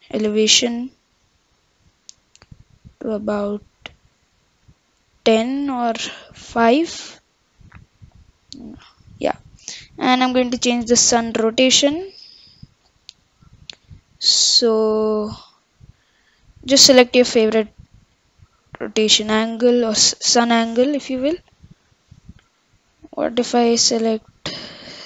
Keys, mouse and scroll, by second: 10.5-13.6 drag.